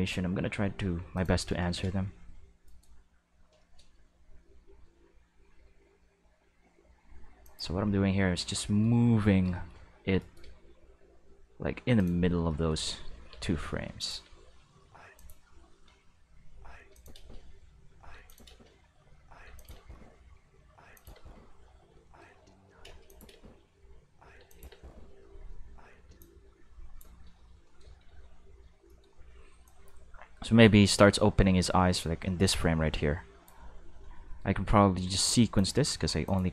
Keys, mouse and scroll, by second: 1.1 click, 1.6-1.9 shift+middle drag, 2.6 right click, 3.7 middle click, 3.9 g, 5.3-7.4 middle drag, 7.4 click, 9.6 shift+middle click, 10.2 right click, 10.4 g, 11.9 click, 12.5 shift+middle drag, 13.3-19.7 typing, 14.0 click, 15.1 click, 16.9 click, 18.2 click, 19.5 click, 20.8 space, 20.9 click, 21.1 space, 22.0 shift+middle click, 22.3 middle click, 22.8 space, 23.0 click, 23.3 space, 24.3 space, 24.4 click, 24.6 space, 26.0 space, 26.2-26.9 drag, 27.6 shift+middle drag, 28.0 q, 29.6-33.4 drag, 35.5 click, 36.2 click.